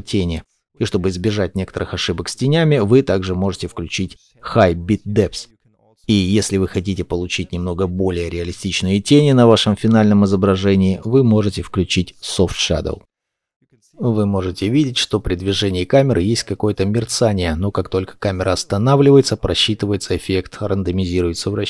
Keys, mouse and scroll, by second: 2.9 scroll down 1, 3.1 scroll, 3.1-3.6 scroll up 1, 3.6 shift+middle click, 4.0-7.0 scroll down 1, 13.0 middle click, 14.7 scroll up 1, 16.0 middle click, 20.8 middle click.